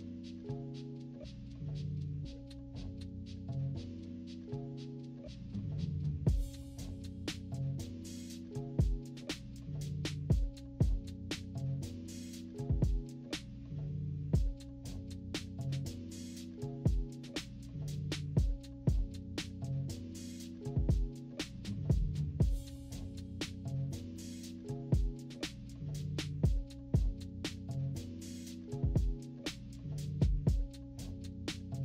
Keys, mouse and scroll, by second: 0.3-1.3 drag, 1.3-2.1 typing, 2.3 scroll down 2, 2.7-4.6 drag, 5.0 -, 5.4 scroll up 2, 5.4 =, 5.5-5.8 scroll down 2, 5.8 scroll up 2, 5.8 =, 6.5-10.3 drag, 10.6 -, 11.0 =, 11.4-13.4 drag, 13.6 -, 14.4-14.8 scroll up 4, 14.5 ctrl+=, 14.8 scroll down 2, 14.9 ctrl+=, 15.4-18.6 drag, 19.0 -, 19.3 =, 19.5 scroll up 2, 19.8-21.3 drag, 21.6-23.1 typing, 22.2 scroll down 2, 22.5 scroll up 2, 23.4-25.1 drag, 25.4 -, 25.8 =, 25.9-26.3 scroll down 4, 26.0 =, 26.6-27.7 drag, 27.9 -, 28.1-28.5 scroll up 2, 28.4 =, 28.6-31.6 scroll down 3, 31.6-31.8 scroll down 1.